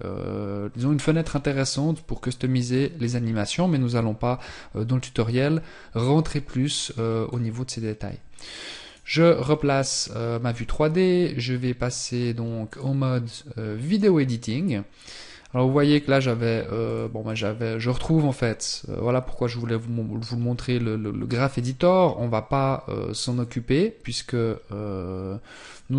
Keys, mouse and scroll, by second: 8.8 click, 11.6 click.